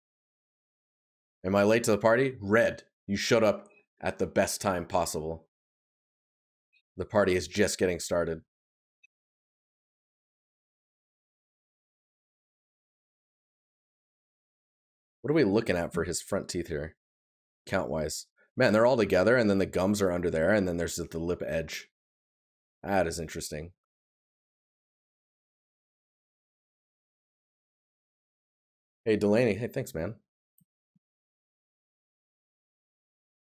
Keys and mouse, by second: 7.0 right click, 13.6 right click.